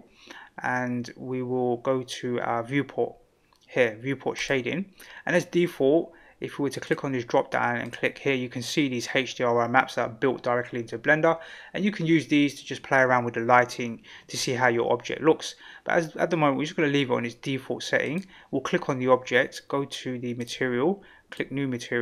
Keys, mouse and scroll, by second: 4.5 click, 6.8-16.4 drag, 18.0 click, 20.4 click, 21.3 click.